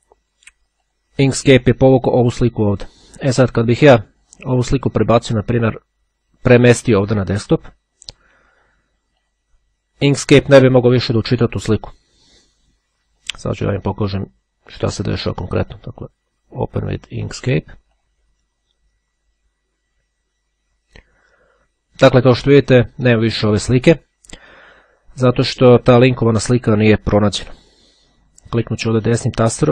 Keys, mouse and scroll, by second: 0.9 click, 2.2 click, 5.0-8.6 drag, 9.2 click, 13.6-16.6 right drag, 18.1 click, 28.6 right click.